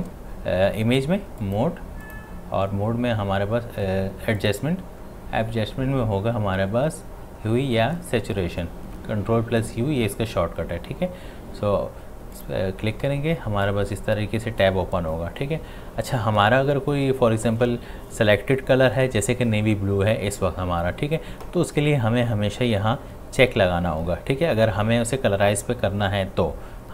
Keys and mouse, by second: 1.4 click, 4.4 click, 12.4-26.9 drag.